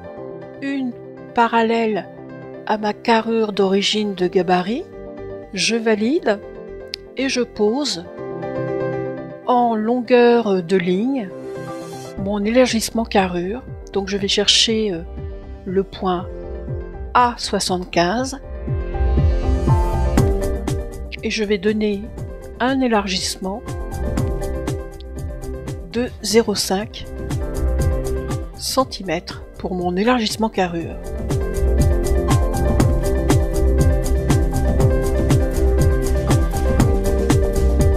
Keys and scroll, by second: 9.2 BackSpace, 22.9 BackSpace.